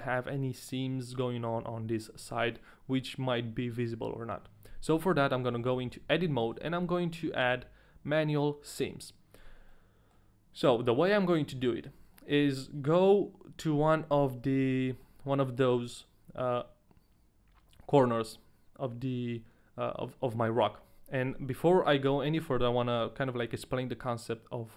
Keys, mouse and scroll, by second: 4.9 Tab, 5.3 middle click, 5.6 a, 5.9 a, 6.1-8.5 scroll up 4, 6.5 Tab, 6.5 middle click, 6.5 a, 9.7 middle click, 11.3-11.8 scroll up 1, 11.8 scroll down 1, 12.4 shift+middle click, 12.4-12.7 scroll down 1, 14.2 scroll down 2, 14.7 shift+middle click, 15.2 middle click, 21.4 Tab, 21.7 middle click, 23.0 KP_1.